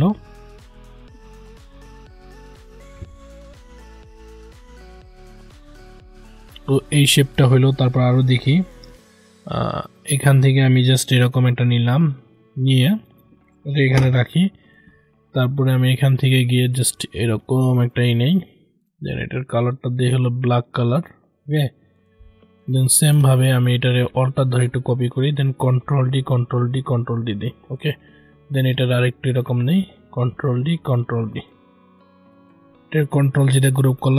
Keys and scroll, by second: 25.8 ctrl+d, 30.2 ctrl+d, 33.2 ctrl+g.